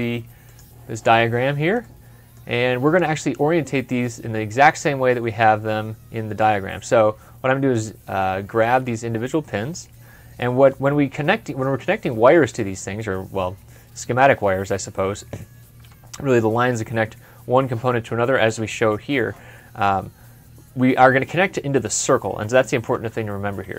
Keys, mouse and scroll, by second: 1.2 middle click, 1.7 scroll down 1, 4.8 scroll down 1, 7.0 scroll up 1, 7.6-8.1 scroll down 1, 8.1 middle click, 22.8 typing, 23.6 scroll up 1.